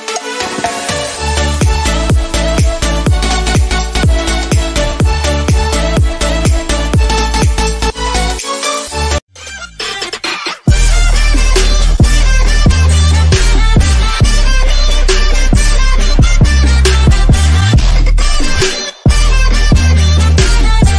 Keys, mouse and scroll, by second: 0.8 click, 0.9 ctrl+s, 3.2 click, 6.0 Right, 6.6 1, 7.0 Return, 8.8 click.